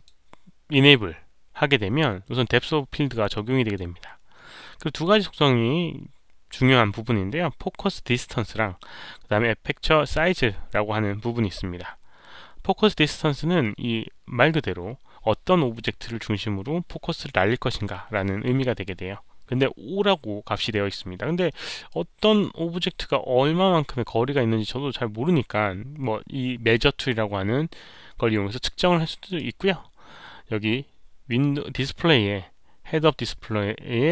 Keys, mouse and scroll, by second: 2.5 click, 3.3 click, 8.2 click, 10.6 click, 21.4 click, 26.5 click, 29.2 right click, 29.2 click, 31.2 click, 31.3 right click.